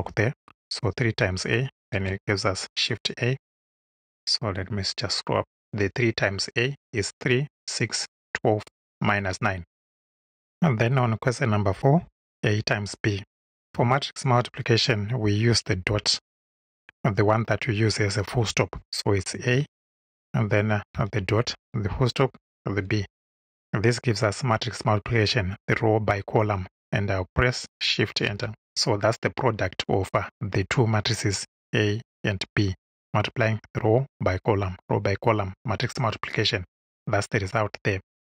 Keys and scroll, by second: 1.9 shift+Return, 19.2 shift+a, 20.9 ., 21.9 ., 22.8 shift+b, 28.2 shift+Return.